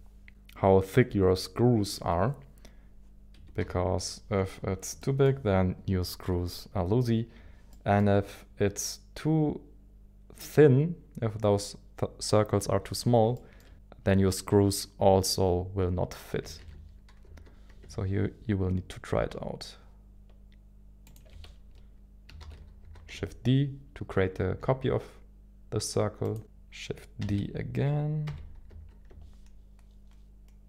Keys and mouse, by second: 3.3 KP_1, 3.6 KP_7, 4.9 shift+middle click, 7.7 shift+middle click, 13.6 shift+middle click, 16.6 shift+d, 17.2 y, 22.4 shift+d, 22.8 shift+x, 27.2 shift+d, 28.2 shift+d, 28.3 g, 28.7 y.